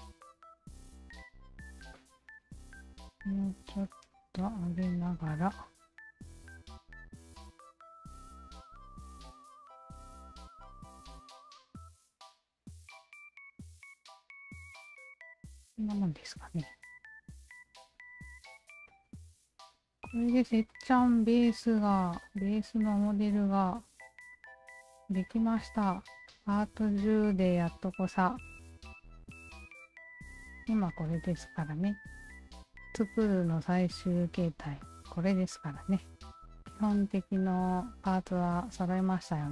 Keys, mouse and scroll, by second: 0.6 f, 1.1 w, 1.5 alt+right click, 2.0-2.8 alt+drag, 2.8 w, 3.4 alt+click, 5.0 Tab, 5.6 alt+click, 6.6 1, 6.8 alt+click, 8.8 r, 9.6-11.4 shift+drag, 11.8 Tab, 12.2 alt+right click, 12.9 shift+click, 13.2 alt+right drag, 13.9-14.5 alt+drag, 14.7 alt+right drag, 15.1-17.9 alt+drag, 18.2 alt+drag, 18.4-20.2 alt+drag, 20.7 alt+click, 21.1 alt+drag, 21.5 alt+drag, 21.8 alt+drag, 22.2-25.2 alt+drag, 25.3 alt+drag, 25.6 alt+drag, 25.9 alt+drag, 26.3 alt+drag, 26.6 alt+click, 27.3 alt+right click, 27.7-32.0 drag, 33.3 alt+click, 34.2 alt+click, 34.3 alt+right click, 35.8 alt+click, 36.9-38.2 alt+drag, 38.5 alt+click, 38.9 alt+click, 39.3 alt+click.